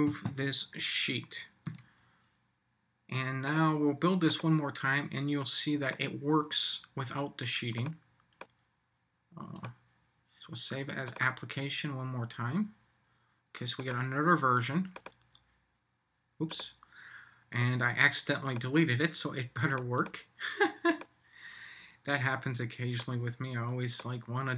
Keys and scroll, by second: 1.6 super+s.